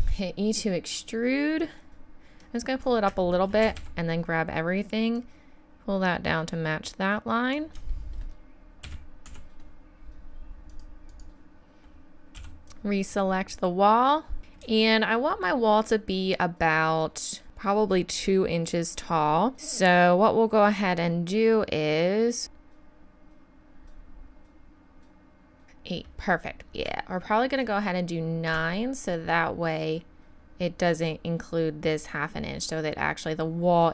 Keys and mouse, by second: 2.4 click, 3.2-4.2 drag, 3.6 a, 3.8 a, 4.7-7.1 middle drag, 7.9-9.3 middle drag, 8.8 a, 9.3 z, 10.7-13.0 drag, 12.3 b, 22.4-25.6 drag, 26.7-29.6 middle drag.